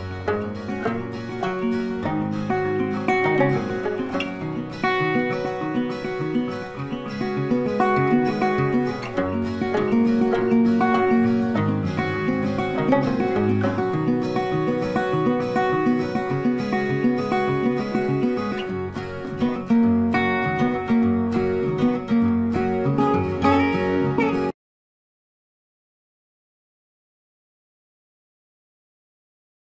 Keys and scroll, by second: 0.3 ctrl+space, 1.2 ctrl+shift+b, 1.5 ctrl+shift+z, 6.7 space, 7.2 z, 10.7 space, 13.1 Page_Down.